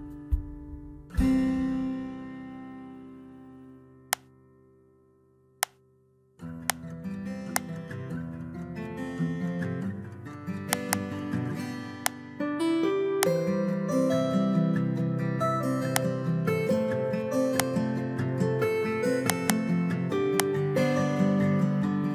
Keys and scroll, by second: 0.8 ctrl+v, 14.5 ctrl+v.